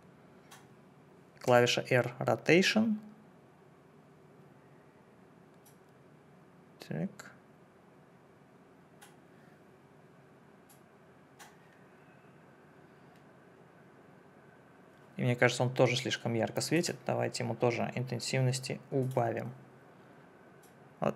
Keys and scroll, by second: 1.5 r.